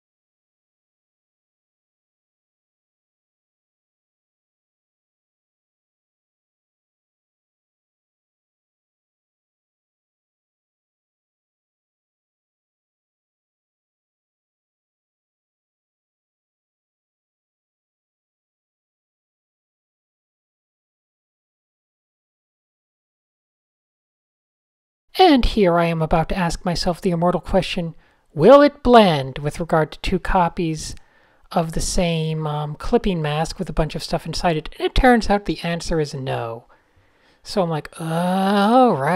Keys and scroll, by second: 0.3 super+z, 2.0 super+z, 3.5 f, 4.2 super+space, 4.2 super+space, 5.1 a, 5.4 super+-, 5.7 d, 6.1 Tab, 6.3 alt+shift+super+r, 7.7 n, 8.7 super+z, 10.9 a, 11.7 g, 11.9 Tab, 12.6 super+h, 14.1 a, 14.2 Tab, 14.4 d, 15.3 a, 16.9-17.5 typing, 18.5 super+z, 19.7-20.6 typing, 22.9 super+z, 23.0 super+v, 23.3 super+h, 23.8 a, 25.9 a, 26.5 alt+shift+super+b, 27.0 alt+super+b, 27.6 alt+shift+super+b, 31.6 alt+shift+super+b, 31.8 super+z, 33.2 alt+shift+super+b, 33.6 super+z, 37.1 super+z, 37.3 super+z, 37.9 shift+super+a.